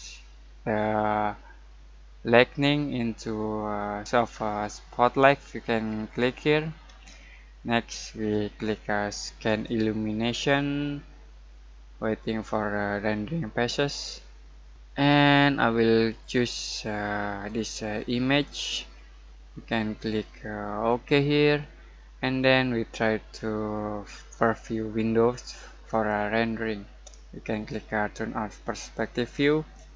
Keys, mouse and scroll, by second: 6.2 click, 9.4 click, 17.4 click, 17.4 typing, 20.8 click, 25.8 click, 29.3-29.9 drag.